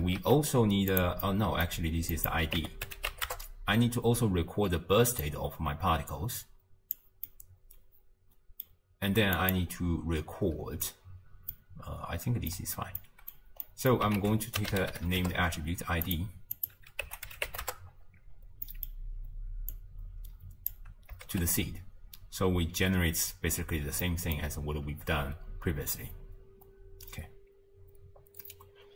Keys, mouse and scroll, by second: 0.2 shift+d, 1.2 middle click, 2.2-5.2 drag, 5.2 click, 7.3-9.4 middle drag, 9.4 click, 11.5-14.2 middle drag, 14.2 ctrl+a, 16.6-18.3 drag, 18.3-18.7 scroll up 1, 18.7-19.7 middle drag, 19.7 click, 21.3 shift+space, 23.9 space, 24.0-25.3 middle drag, 25.3 space.